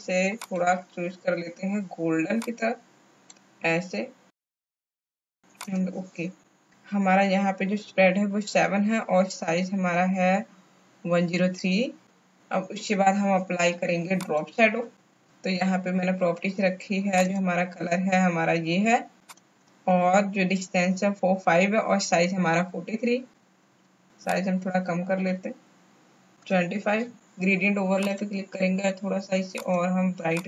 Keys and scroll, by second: 26.4 KP_5.